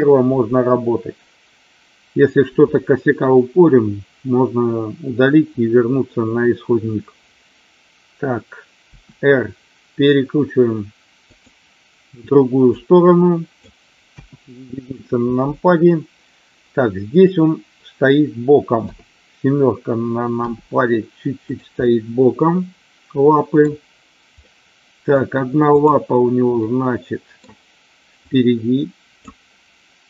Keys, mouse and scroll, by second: 8.9 r, 11.3 click, 12.8 click, 20.4 r, 21.4 click, 21.9-23.6 middle drag, 24.4-25.1 middle drag, 26.5-27.4 middle drag, 28.2 click.